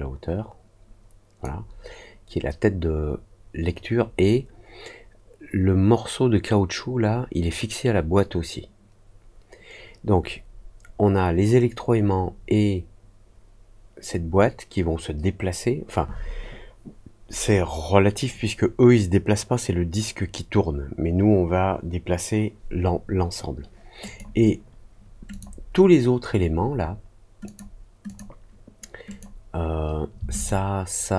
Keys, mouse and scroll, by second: 24.0 click, 25.2 click, 27.4 click, 28.0 click, 29.0 click, 30.3 shift+click.